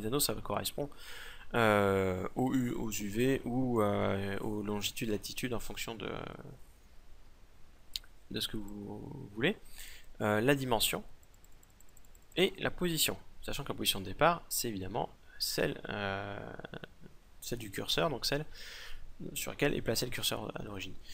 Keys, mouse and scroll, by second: 8.2-10.0 drag, 10.0 middle click, 10.7-13.7 drag, 13.7-21.1 middle drag.